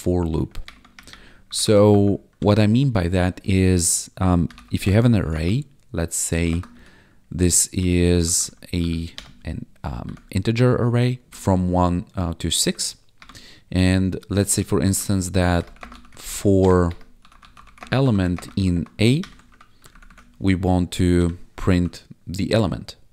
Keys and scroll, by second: 0.6 Return, 1.4 Up, 2.3 Tab, 4.2-5.3 typing, 6.4 =, 6.4 space, 6.7 [, 7.7 Tab, 8.2 ctrl+s, 8.3 Right, 9.1 BackSpace, 10.0 Right, 11.3 ctrl+Down, 12.6 Down, 13.1 Return, 14.2-19.4 typing, 19.4 ctrl+s, 19.9 ctrl+Down, 21.7 ctrl+s.